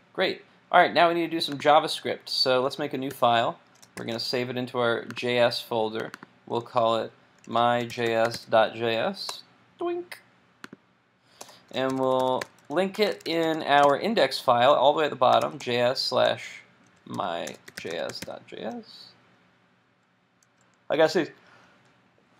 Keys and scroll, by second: 3.1 super+n, 4.0 shift+super+s.